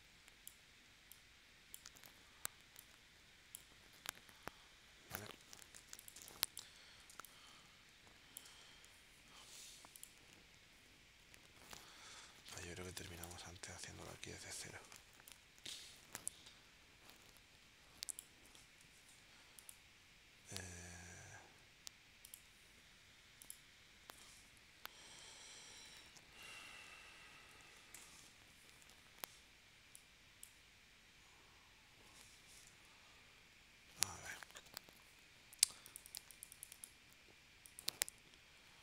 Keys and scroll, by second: 5.7 v, 6.2 space, 7.1 space, 12.9 space, 14.4 l, 18.8 v, 27.4 2, 27.9 Return.